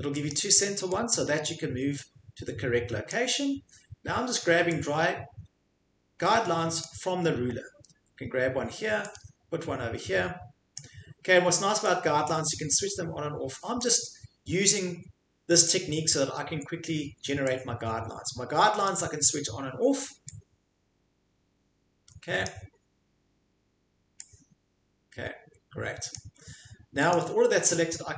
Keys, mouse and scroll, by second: 0.3 click, 3.1 click, 6.8 click, 10.8 click, 13.8 click, 18.9 click, 22.4 click, 26.1 click, 27.1 click.